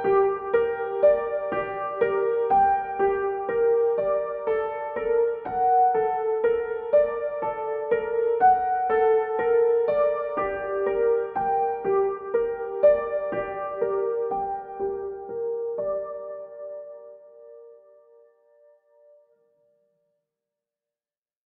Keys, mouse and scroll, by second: 4.3 z, 5.0-7.8 drag, 10.4-19.4 drag, 19.4 ctrl+d, 21.4-21.5 drag.